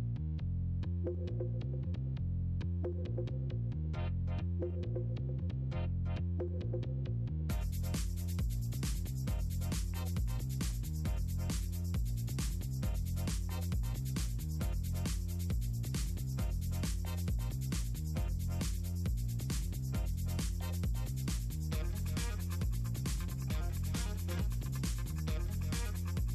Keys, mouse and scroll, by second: 0.2 click, 1.9 click, 2.2 drag, 2.8-3.1 drag, 4.2 click, 4.5 shift+click, 5.4 ctrl+shift+click, 8.3 click, 13.4 click, 13.6 click, 14.3 click, 16.0 ctrl+shift+click, 16.6 click, 17.6 middle click, 17.9 middle click, 18.6 click, 18.8 click, 19.0 middle click, 19.4 Delete, 20.4 click, 21.0 click, 21.6 click, 22.1 Delete, 22.2 click, 23.0 click, 23.6 Delete, 23.8 click, 24.6 Delete, 24.8 click, 25.2 click, 26.0 click.